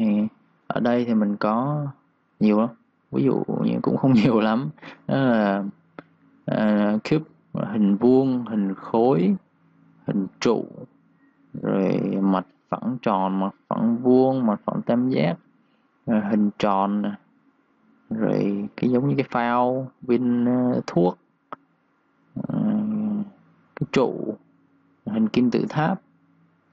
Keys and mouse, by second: 0.6 click, 1.2 click, 1.6 typing, 2.1 click.